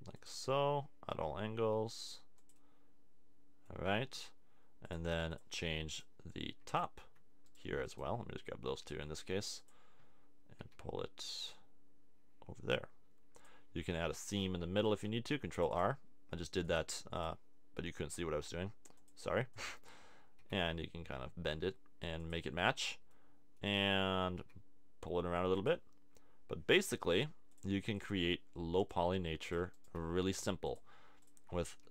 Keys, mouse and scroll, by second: 1.7 g, 10.8 g, 13.4 click, 14.9 ctrl+r, 20.4 g, 22.3-23.8 drag, 24.5 g, 28.8 middle click, 31.7 g.